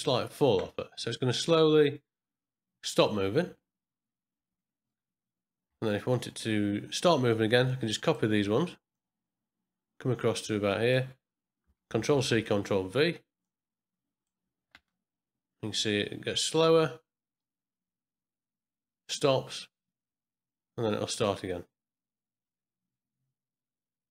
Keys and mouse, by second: 0.6 space, 5.7 space, 5.9-6.8 middle drag, 7.6-8.2 drag, 8.9-10.9 drag, 11.9 ctrl+c, 12.2 ctrl+v, 13.4-14.3 drag, 14.7 space.